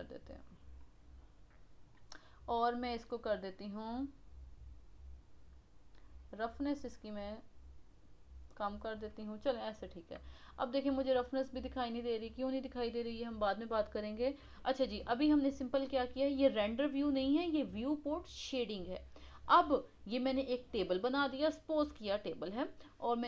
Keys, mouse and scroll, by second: 2.7-3.2 scroll down 6, 5.9-8.9 drag, 9.5-10.9 middle drag, 10.9 scroll up 1, 11.1-12.2 middle drag, 12.2 scroll down 2, 15.4-15.8 scroll down 3, 15.8-18.8 middle drag, 18.8-19.2 scroll up 3.